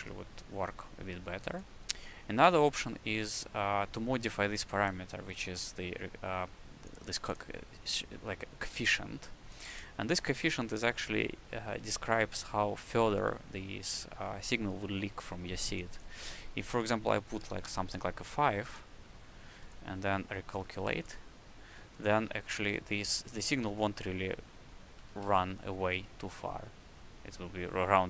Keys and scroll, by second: 17.4 KP_5, 17.6 KP_Enter, 25.0 w.